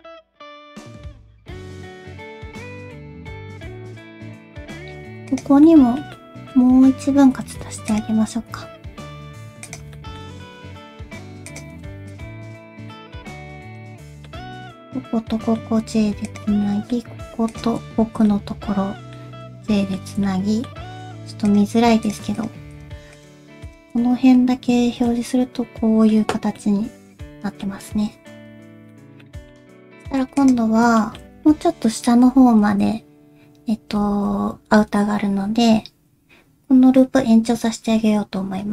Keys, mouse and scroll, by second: 1.4 middle click, 2.6 1, 2.8 click, 3.1 shift+click, 3.5 alt+s, 3.9 middle click, 4.3 alt+z, 4.3 middle click, 4.3-5.0 scroll up 2, 5.0 2, 5.3 click, 5.6 middle click, 6.1 middle click, 7.1 ctrl+w, 7.4 2, 7.6 1, 7.9 click, 8.4 g, 9.9 middle click, 10.4 alt+s, 12.1 shift+click, 12.7 alt+z, 12.9 middle click, 14.4 alt+z, 14.7 middle click, 15.8 j, 16.3 click, 16.6 middle click, 17.5 shift+click, 18.0 alt+z, 18.3 j, 19.4 j, 19.7 middle click, 20.1 alt+z, 20.2 alt+z, 20.3 middle click, 20.9 3, 21.5 click, 22.0 click, 22.4 shift+click, 22.7 shift+click, 23.1 shift+click, 23.9 shift+click, 25.1 shift+h, 25.7 middle click, 26.4 scroll down 2, 26.6 middle click, 28.5 alt+h, 28.9 middle click, 29.0 shift+middle click, 29.1 scroll down 1, 29.2 middle click, 29.7 2, 30.4 alt+click, 31.0 shift+middle click, 31.2 scroll down 1, 31.2 alt+z, 31.2 shift+middle click, 31.2 scroll up 1, 31.6 KP_1, 32.4 alt+z, 32.8 alt+z, 34.1 alt+z, 35.3-36.1 scroll up 1.